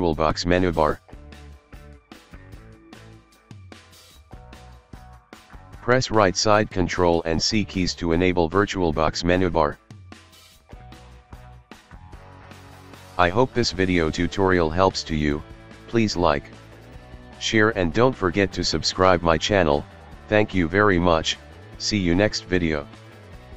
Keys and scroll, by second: 5.2-6.0 typing, 6.7 ctrl+., 7.6 ctrl+c.